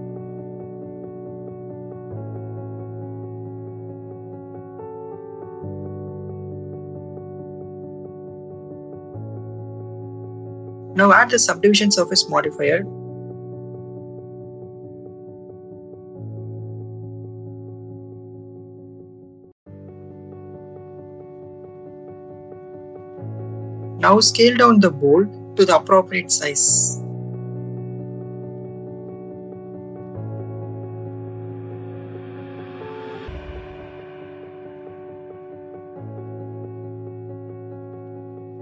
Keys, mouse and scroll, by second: 1.8-3.1 drag, 3.6 click, 4.5-8.3 drag, 8.8 click, 9.2 click, 10.7 Tab, 11.7-13.6 drag, 15.0 click, 16.7 Tab, 18.0 /, 19.1 click, 19.6 ctrl+z, 20.2 a, 20.8 click, 22.7 click, 25.8 click, 26.6 click, 28.4 click, 30.0 click, 31.3 shift+middle click, 32.0 middle click, 32.6 shift+middle click, 34.3-35.3 drag, 36.0 shift+middle click, 36.6 middle click, 38.2-38.6 drag.